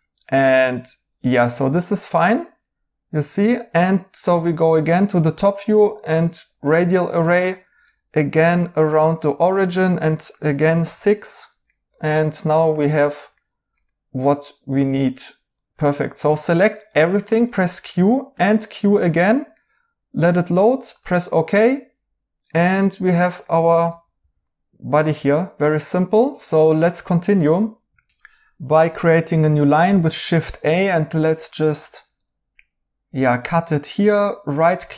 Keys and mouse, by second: 1.6 right click, 4.9 right click, 7.5 right click, 11.6 right click, 13.0 right click, 17.3 q, 17.7 right click, 18.3 q, 22.6 right click, 23.8 alt+t, 24.1 alt+z, 24.4 right click, 25.6 alt+z, 26.3 right click, 29.8 a, 34.1 right click.